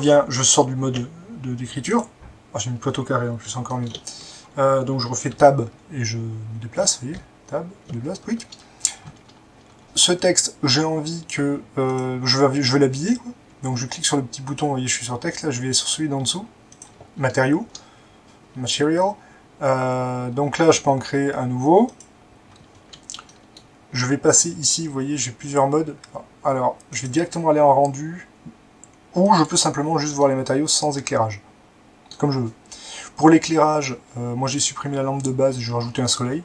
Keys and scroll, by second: 5.3-6.7 Tab, 7.0 Tab, 7.1-7.8 Tab, 7.9 Tab.